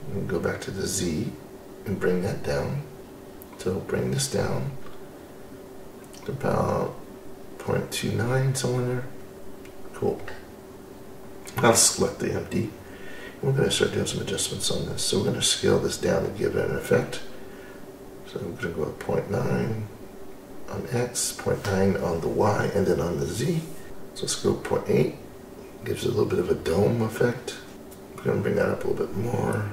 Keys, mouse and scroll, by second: 2.3-3.8 drag, 7.8 click, 10.3-14.4 drag, 15.4-20.8 drag, 21.2-23.4 scroll up 2, 23.4-26.9 drag, 27.6 scroll up 2, 28.1-29.7 drag.